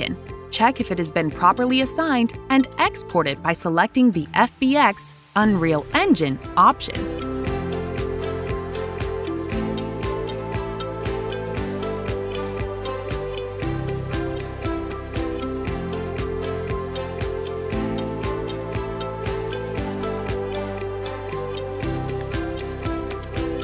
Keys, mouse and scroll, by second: 0.3 click, 2.8 click, 4.3 click, 10.7 click, 13.2 right click, 15.9 click, 17.5 click, 18.7 click, 19.8 click.